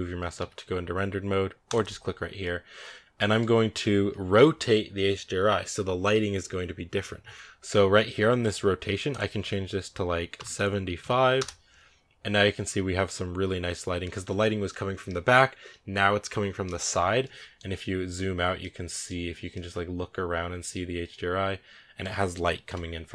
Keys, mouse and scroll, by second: 0.3 z, 1.5-8.5 drag, 9.8-12.0 drag, 16.7 scroll down 5, 17.0-17.7 middle drag, 17.7-18.4 scroll down 12, 18.5 middle click, 19.1 scroll down 1, 19.4-20.6 middle drag, 20.7-21.6 middle drag, 21.6 middle click, 22.5 KP_0.